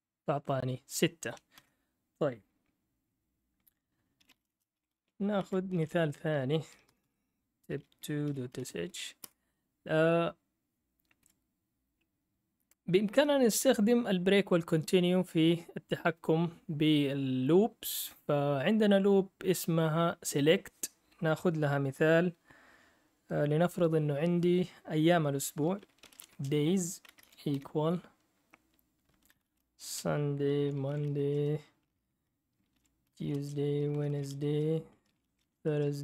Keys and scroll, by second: 1.5 ctrl+l, 4.0-9.1 typing, 9.2 Return, 10.9-12.6 typing, 25.7-31.5 typing, 32.5-36.0 typing.